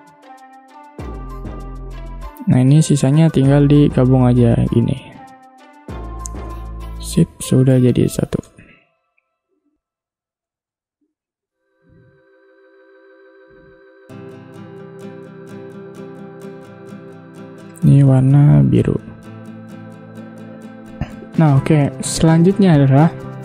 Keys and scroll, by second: 7.0 v, 8.5 space, 9.7 i, 10.6 v, 18.0 i, 18.7 v.